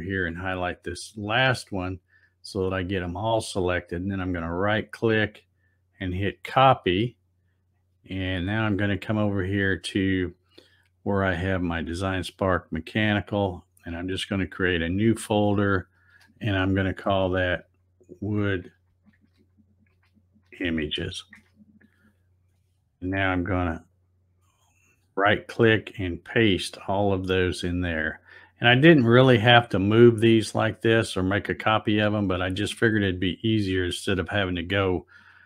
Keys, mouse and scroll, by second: 3.8 right click, 7.1 click, 10.2 click, 12.8 click, 13.0 click, 14.6 click, 17.1-20.5 typing, 23.7 click, 23.9 click, 25.7 right click, 28.4 click.